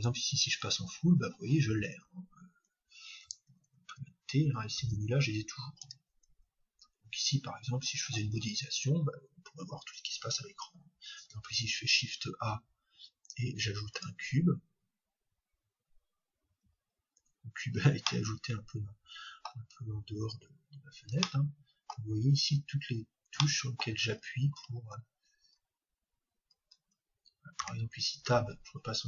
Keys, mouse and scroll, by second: 4.8 t, 5.8 n, 6.3 t, 11.4 shift+a, 23.5-29.0 middle drag.